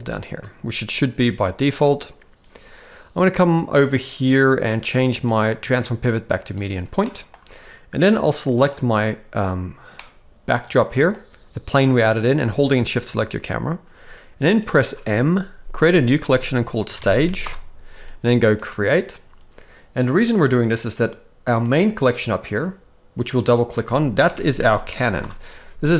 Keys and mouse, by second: 5.1-6.5 drag, 7.0-7.3 middle drag, 8.5 click, 10.0-11.1 middle drag, 12.9 shift+click, 14.8 m, 20.4 click, 23.3 click, 23.5-25.2 drag, 24.7 n, 25.0 n.